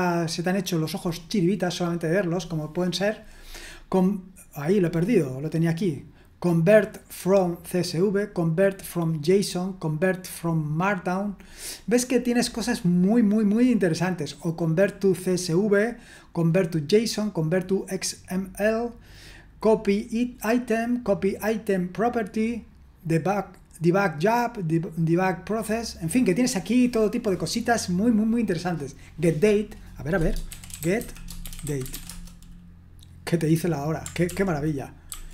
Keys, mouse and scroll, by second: 0.5-2.4 scroll up 1, 3.2-4.7 scroll up 2, 4.7-7.2 scroll down 2, 7.2-12.1 drag, 12.2-14.6 scroll down 1, 14.6-16.5 drag, 25.1-26.0 scroll down 1, 26.3-27.7 scroll down 1, 27.7-28.7 scroll down 1, 30.2-32.4 typing, 34.2 ctrl+p, 35.1 ctrl+a.